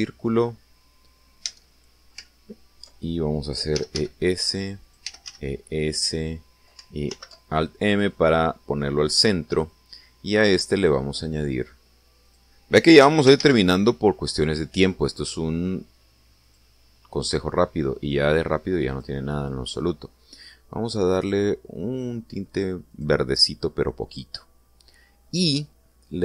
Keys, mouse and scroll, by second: 0.7 click, 2.4 Tab, 4.7 e, 4.9 s, 5.8 click, 6.0 e, 6.2 s, 6.9 click, 8.0 alt+m, 8.8 click, 11.7 click, 13.2 click, 14.0 x, 14.4 shift+a, 17.4 click, 18.2 click, 19.0 click, 22.0 click, 23.8 click.